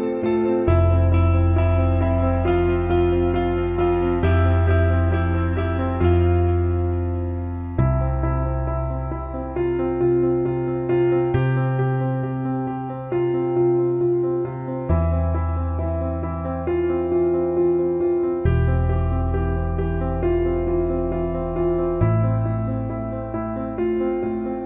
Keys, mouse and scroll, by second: 0.1-1.3 drag, 2.8 click, 3.0 click, 3.4 click, 4.7-5.9 drag, 6.1-7.4 drag, 9.2 alt+middle click, 10.1 click, 11.1 alt+middle click, 12.0 click, 13.4-14.5 shift+drag, 14.9 alt+middle click, 15.6-17.0 drag, 17.2 shift+click, 20.6-22.1 alt+middle drag, 24.0-24.3 alt+shift+middle drag.